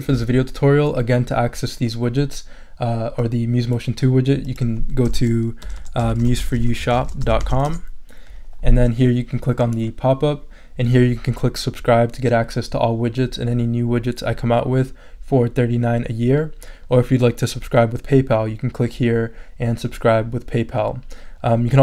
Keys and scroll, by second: 5.6-8.0 typing.